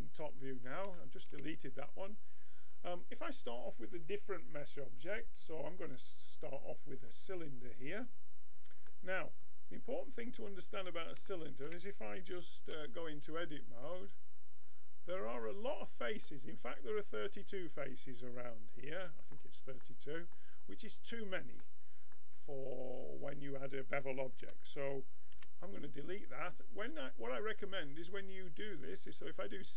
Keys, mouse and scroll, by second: 2.6-5.0 drag, 8.9-10.6 middle drag, 12.6 Tab, 14.6-17.2 drag, 17.2-18.3 middle drag, 19.8-20.9 middle drag, 24.4 Tab, 25.4 x, 27.0-28.9 drag.